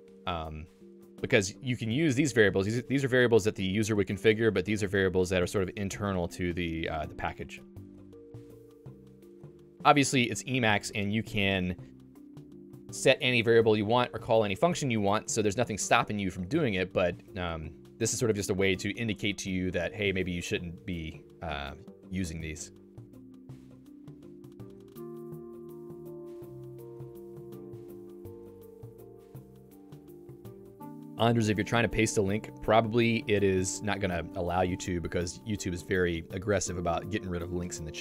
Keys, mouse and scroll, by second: 1.6-2.4 typing, 4.3 Escape, 4.4-6.3 typing, 7.6 Escape.